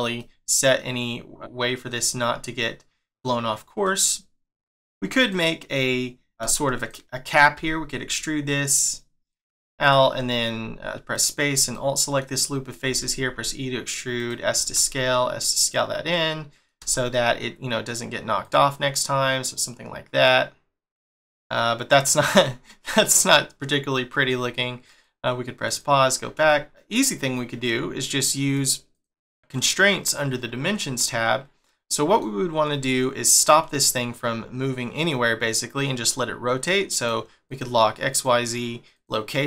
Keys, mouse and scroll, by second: 0.2 middle click, 1.8-2.6 scroll up 1, 2.6 middle click, 3.4 scroll down 1, 3.8 middle click, 5.2 click, 5.7 middle click, 6.4 Tab, 6.8 click, 7.5 e, 11.1 alt+click, 11.7 middle click, 12.9 e, 16.1 middle click, 16.8 Tab, 17.1 middle click, 18.4 click, 21.1 middle click, 25.0 click, 25.6 click, 26.5 shift+middle click, 28.5 click, 28.9 click, 31.0 middle click, 36.9 click, 37.5 click, 38.1 click, 38.9 click.